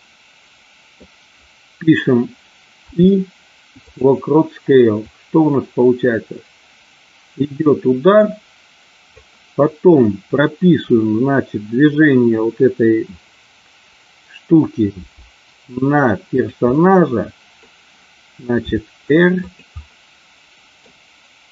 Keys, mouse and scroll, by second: 2.8 i, 5.0-9.2 drag, 14.9 g, 16.7 scroll up 1, 16.8-17.5 middle drag, 18.7 r, 19.3 click, 19.8-20.9 middle drag.